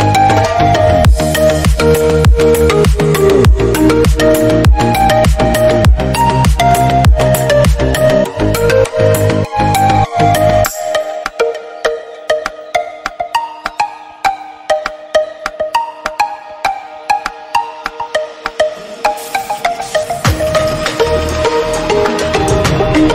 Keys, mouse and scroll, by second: 0.3 ctrl+r, 0.8 scroll down 3, 0.8 shift+middle click, 1.4 Tab, 1.5 middle drag, 1.7 drag, 1.9 scroll down 2, 2.0-2.5 middle drag, 2.5 scroll up 2, 2.8-3.1 middle drag, 3.1 scroll up 1, 3.3 middle click, 3.6 scroll down 1, 3.7-4.3 shift+middle drag, 4.3 click, 4.4 Tab, 4.6 middle click, 4.9 scroll up 1, 5.1-6.1 middle drag, 6.1-6.5 scroll down 1, 6.5 middle click, 7.4 ctrl+r, 8.6-9.9 middle drag, 10.8 middle click, 11.1-11.8 scroll up 1, 11.8 3, 12.0-13.2 drag, 13.2 e, 14.3 ctrl+z, 14.6 click, 15.9 click, 16.6 shift+middle click, 16.9 click, 17.9 Tab, 18.0 scroll down 2, 18.1-18.8 middle drag, 18.8 scroll down 1, 19.0 shift+middle click, 19.3 scroll up 1, 19.4 Tab, 19.5 middle click, 19.9 click, 20.7 Tab, 20.8-21.7 scroll down 1, 21.7 scroll up 1, 21.9 Tab, 22.2 click, 22.8 middle click.